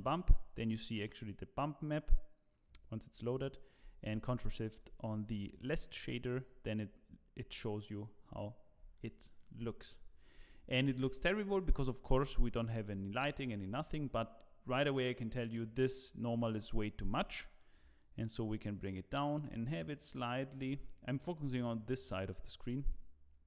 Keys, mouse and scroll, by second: 4.6 ctrl+shift+click, 5.8 scroll down 2, 6.0 middle click, 6.8-7.5 scroll up 1, 7.5-8.2 scroll up 1, 8.2-9.1 scroll up 1, 9.1 shift+middle click, 10.0-10.4 scroll down 4, 10.5 shift+middle click, 10.9 scroll up 2, 13.6 scroll up 1, 17.0-17.5 scroll up 3, 17.3 middle click, 18.0 click.